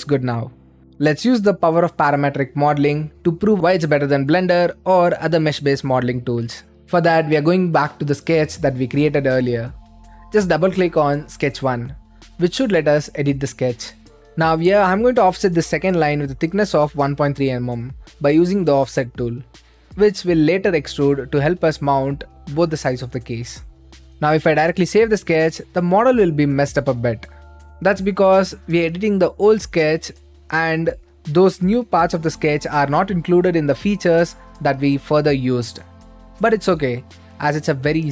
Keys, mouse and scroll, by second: 0.0 click, 3.6-5.1 drag, 6.3-7.4 drag, 7.9 click, 8.8-10.3 right drag, 10.3 click, 12.6 click, 13.4 click, 13.8 click, 14.2 click, 15.3-16.4 drag, 17.6-18.8 drag, 20.6-22.3 middle drag, 22.3-26.0 right drag, 26.1-27.2 drag, 28.0-31.0 right drag, 31.0 middle click, 31.6 click, 32.5-33.7 right drag, 33.7 middle click, 34.5 right click, 36.2-38.1 drag.